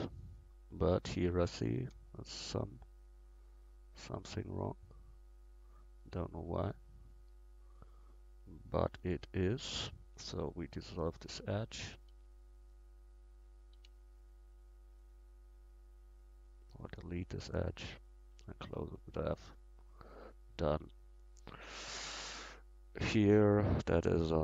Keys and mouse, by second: 1.2 Tab, 2.3-3.6 right drag, 4.6-12.2 right drag, 10.0 x, 12.2 x, 13.8 x, 15.7 middle click, 16.6-17.8 right drag, 17.8 f, 18.3 Tab, 20.8 Tab.